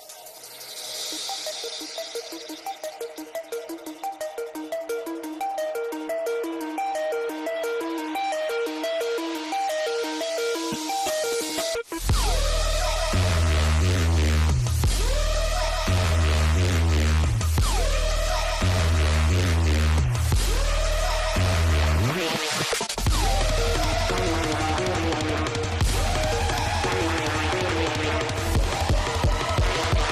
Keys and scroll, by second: 0.6 Escape, 8.4 space, 9.0 Escape, 12.8 space, 18.0 ctrl+z.